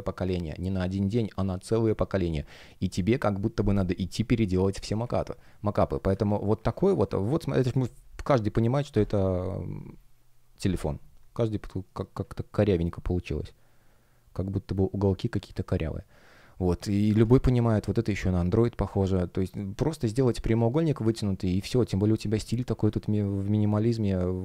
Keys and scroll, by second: 4.9 space, 6.8 space, 11.7 shift+p, 15.9 space, 20.2 space.